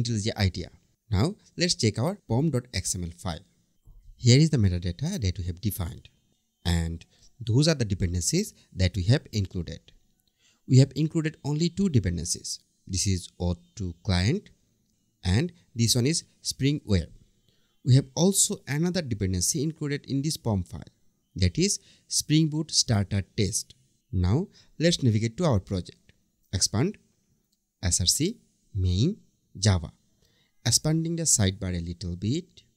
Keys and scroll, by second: 3.3 super+1.